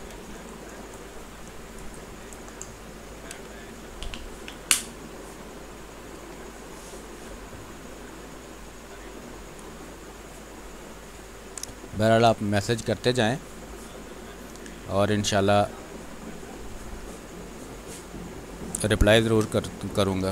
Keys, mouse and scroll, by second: 0.1 space, 2.0 r, 2.2 click, 3.0 b, 3.2 space, 4.4-6.1 drag, 6.1 ctrl+z, 6.3-9.2 drag, 9.2 space, 9.4 click, 9.8 space, 11.1 r, 11.2 click, 11.5 click, 11.9 b, 12.2 space, 12.4 click, 15.4 click, 17.2 r, 17.4-19.1 drag, 19.1 b, 19.3 space, 19.5 click, 19.8 space.